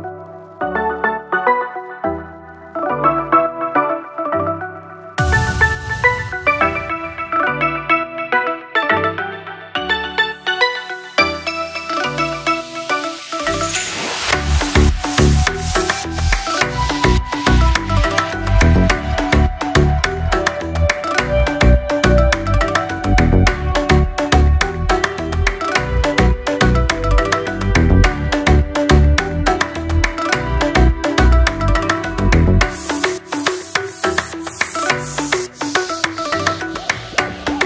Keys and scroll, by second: 6.8 ctrl+s.